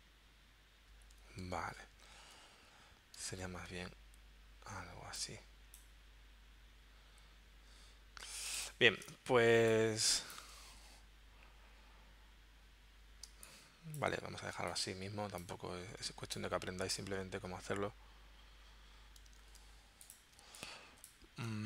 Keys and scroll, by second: 1.6 super+Tab, 3.3 super+Tab, 9.1 space, 13.3 space, 14.5 space, 19.4 super+z, 20.3 space.